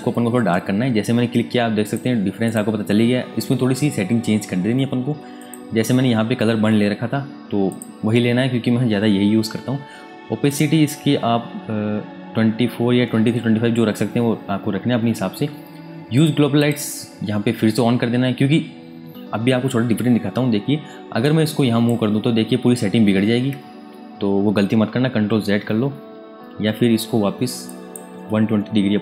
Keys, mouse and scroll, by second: 1.8 click, 5.3 click, 10.5 click, 10.9-11.3 scroll up 1, 11.3-12.0 scroll down 1, 12.0 scroll up 1, 12.3-14.7 scroll down 1, 16.1 click, 21.2 click, 25.0 z, 25.8 ctrl+z, 27.6 click, 28.5 KP_1.